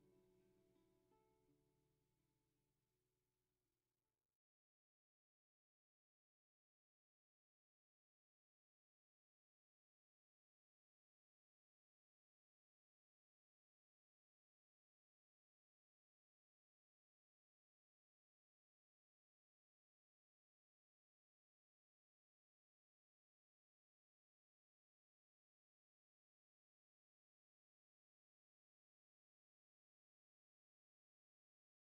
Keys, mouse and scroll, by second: 0.8 ctrl+z, 2.8 ctrl+z, 5.0 ctrl+z, 6.4 ctrl+z, 7.8 ctrl+z, 8.5 ctrl+z, 9.9 ctrl+z, 10.9-12.0 drag, 12.0 Tab, 13.4 r, 15.2-16.3 scroll down 1, 16.3-16.8 scroll down 2, 16.8-17.3 scroll up 2, 17.3 scroll down 1, 17.6 s, 18.9 g, 22.3 s, 28.6 scroll up 3, 28.9 shift+middle click, 29.6-30.2 scroll up 2, 30.2-31.8 drag.